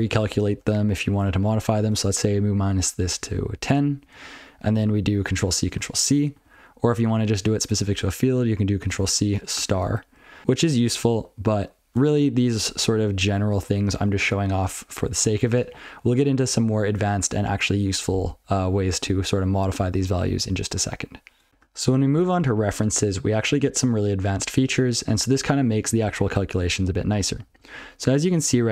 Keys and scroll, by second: 0.1 ctrl+n, 0.3 ctrl+n, 0.5 ctrl+n, 0.7-1.0 ctrl+p, 1.2 ctrl+n, 1.4 ctrl+e, 1.8 ctrl+BackSpace, 3.3-4.1 typing, 4.8 ctrl+a, 5.8 ctrl+c, 6.3 ctrl+f, 6.3 ctrl+p, 6.5 ctrl+f, 6.9 ctrl+f, 7.1 ctrl+f, 12.6 ctrl+n, 12.8 ctrl+n, 13.0-13.4 ctrl+p, 13.5 ctrl+n, 14.3 ctrl+n, 14.5 ctrl+n, 15.4 ctrl+n, 17.8 ctrl+n, 18.4 ctrl+n, 18.7-19.0 ctrl+p, 19.1 ctrl+p, 19.4 ctrl+n, 19.6 ctrl+n, 19.7 ctrl+f, 20.0 ctrl+p, 20.2 ctrl+p, 20.9 ctrl+n, 23.1-23.4 ctrl+f, 23.5 ctrl+n, 24.0 ctrl+f, 24.5 ctrl+n, 24.5 ctrl+n, 24.8 ctrl+n, 24.9 ctrl+n, 25.1 ctrl+p, 25.4 ctrl+p, 25.6 ctrl+n, 25.8 ctrl+p, 26.0 ctrl+n, 26.2 ctrl+n, 26.4 ctrl+n, 26.7 ctrl+n, 27.2 ctrl+p, 27.5 ctrl+p, 27.7 ctrl+n, 27.9 ctrl+n, 28.1 ctrl+n, 28.4 ctrl+p, 28.6 ctrl+n.